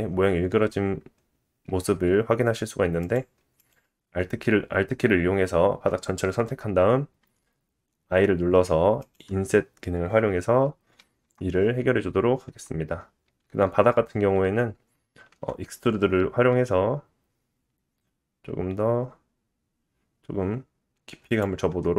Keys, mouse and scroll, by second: 0.5 Tab, 3.0 click, 3.1 alt+middle click, 3.6 alt+click, 11.2 Tab, 12.5 Tab, 15.4 e, 21.7 Tab.